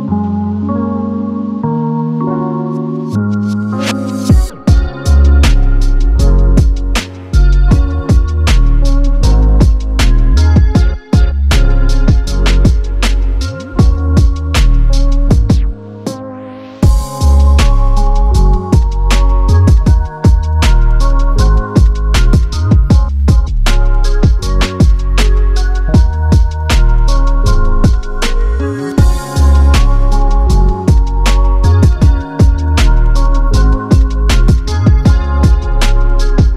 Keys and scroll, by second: 7.9 super+c, 9.7 super+v, 28.5 space, 33.7 Delete.